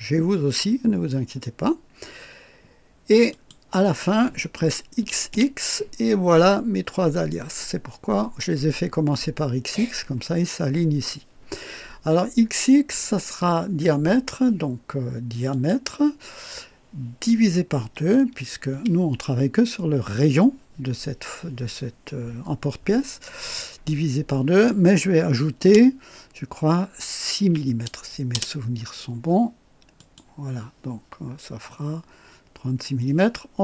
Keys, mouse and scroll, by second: 3.3 click, 5.0-5.3 typing, 15.5 click, 18.7 KP_2, 25.6 KP_Add, 27.4 KP_6, 28.3 Return, 28.5 KP_Enter, 30.0 click.